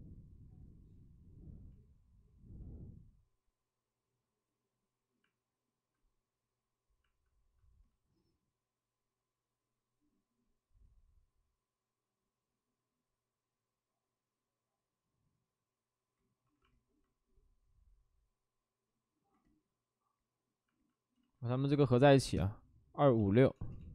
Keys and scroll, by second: 5.2 alt+s, 5.7 alt+s, 7.0 alt+s, 7.3 alt+s, 16.2 ctrl+d, 21.1 ctrl+z, 22.7-23.8 typing.